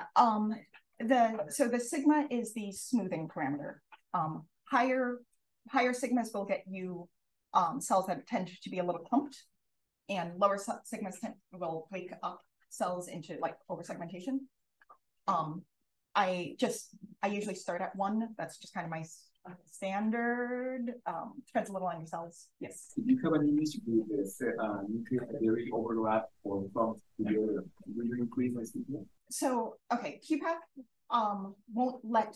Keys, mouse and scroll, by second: 0.9 click.